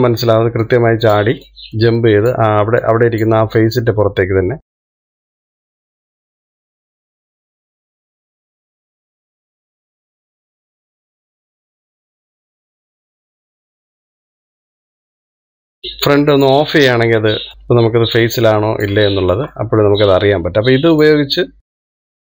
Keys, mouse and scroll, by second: 0.3-2.0 shift+middle drag, 2.0 click, 2.8 click, 4.2 click, 5.0 shift+middle click, 5.6 click, 6.6 click, 6.8 click, 7.3 scroll up 1, 7.5 shift+click, 8.1 click, 8.7 shift+middle click, 8.8 click, 10.1 click, 10.4 click, 10.8 shift+middle click, 11.1 click, 11.8 ctrl+z, 12.4 middle click, 12.7 scroll down 2, 12.8 shift+middle click, 13.4 click, 14.2 shift+middle click, 14.6 click, 15.0 middle click, 15.3 click, 17.5 click, 17.6-18.7 middle drag, 18.7 click, 20.4-21.8 shift+middle drag, 21.8 click.